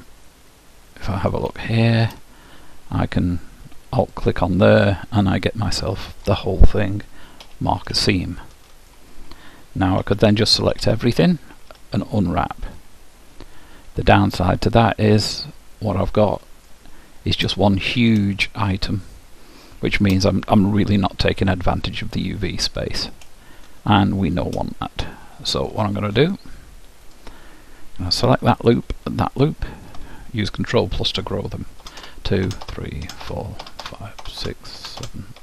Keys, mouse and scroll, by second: 0.3-3.4 middle drag, 4.1-5.7 drag, 4.9-6.7 middle drag, 8.1-9.9 middle drag, 10.0 a, 10.7 a, 11.7 u, 14.5-17.6 middle drag, 18.3-20.3 middle drag, 23.3-26.5 middle drag, 27.1-31.2 drag, 31.9 ctrl+KP_Add.